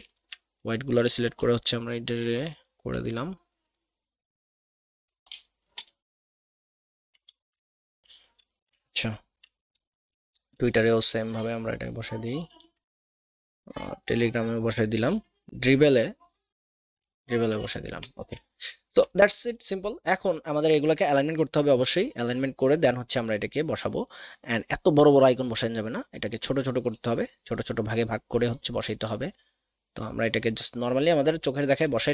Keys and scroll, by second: 5.9 v, 7.3 ctrl+z, 10.2 a, 18.0 alt+v.